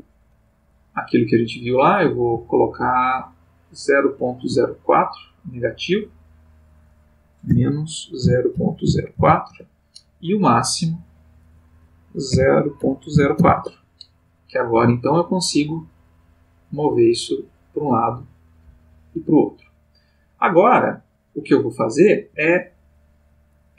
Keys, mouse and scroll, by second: 0.7 click, 2.2 g, 4.5 Escape, 6.2 click, 6.5 click, 7.4-9.1 typing, 9.4 Return, 11.0 click, 11.5 click, 12.3 0, 12.8 ., 13.1 0, 13.3 4, 13.5 Return, 14.7 g, 22.3 Escape.